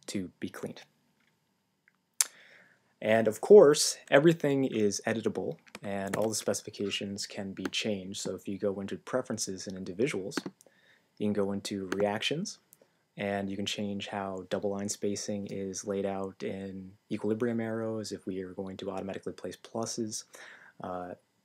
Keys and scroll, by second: 6.1 super+,.